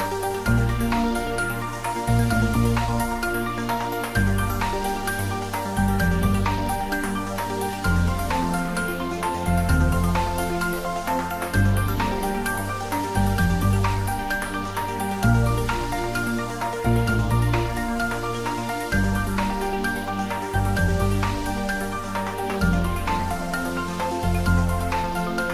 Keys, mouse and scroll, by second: 2.1 3, 2.8-3.2 scroll down 1, 3.2 middle click, 4.0-4.4 scroll down 1, 4.6-6.4 middle drag, 6.4 shift+click, 7.0-8.6 middle drag, 8.6 ctrl+b, 11.0 click, 14.0 click, 19.0 click, 22.5 click.